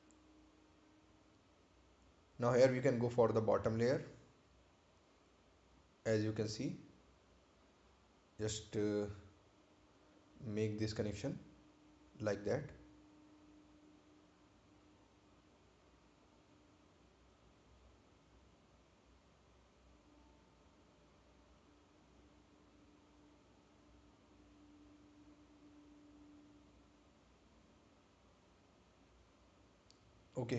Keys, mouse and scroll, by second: 2.2 click, 6.2 right click, 7.1 ctrl+click, 15.1 click, 16.8 right click, 18.1 ctrl+click, 30.1 right click.